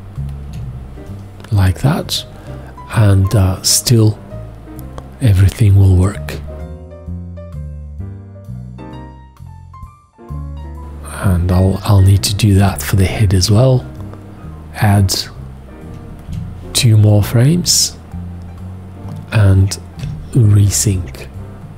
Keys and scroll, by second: 15.9 z, 16.3 z, 20.0 /.